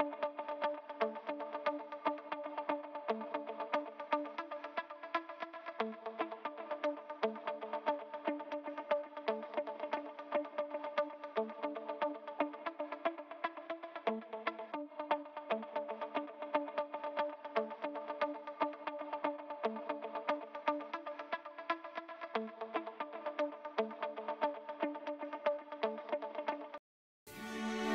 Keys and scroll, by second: 26.7 s.